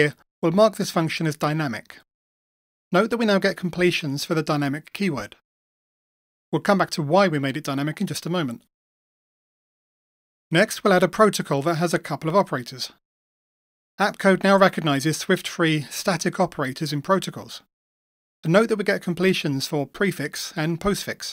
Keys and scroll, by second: 4.4 Return, 11.5 Return, 17.0 Return, 20.4 Return.